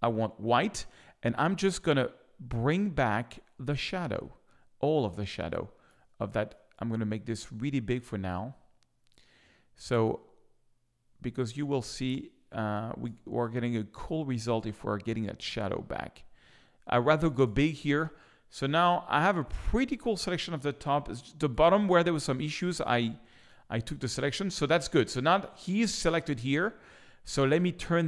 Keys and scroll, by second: 6.0 space, 12.8 space, 17.2 space, 18.6 space, 21.0 z.